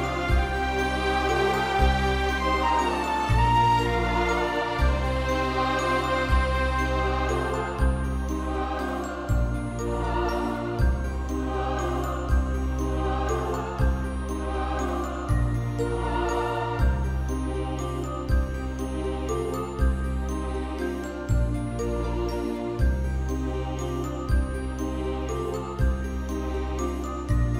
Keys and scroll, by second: 2.4 space, 2.7 space, 3.9 [, 4.0 [, 7.0 space, 17.5 ctrl+v, 20.1 ctrl+=, 20.2 ctrl+=, 20.3 ctrl+=, 20.4 ctrl+=, 20.8 space, 21.4 ], 21.5 ], 24.7 x, 27.4 ctrl+-.